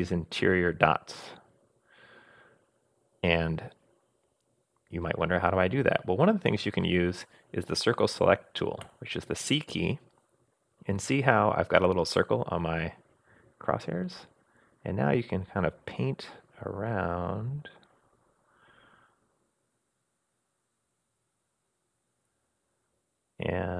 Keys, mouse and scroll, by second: 8.8 c.